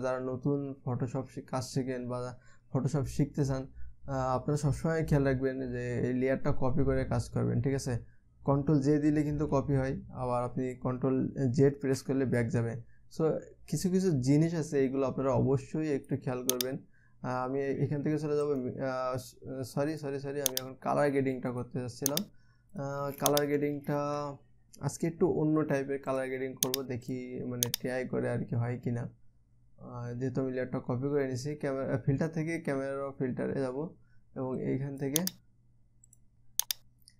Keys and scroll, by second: 9.9 ctrl+j, 12.4 ctrl+z.